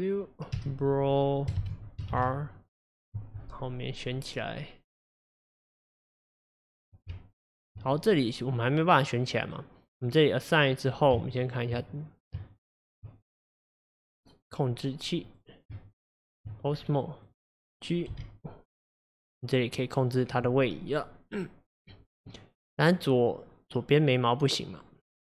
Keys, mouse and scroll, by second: 7.2 Tab, 8.6-9.2 scroll down 2, 9.2-10.1 middle drag, 10.1 click, 11.2 Tab, 12.4 Tab, 13.6 click, 14.8 scroll down 3, 15.3 click, 15.8 Tab, 16.8-17.3 scroll up 1, 17.3 click, 18.2 g, 19.7-22.7 middle drag.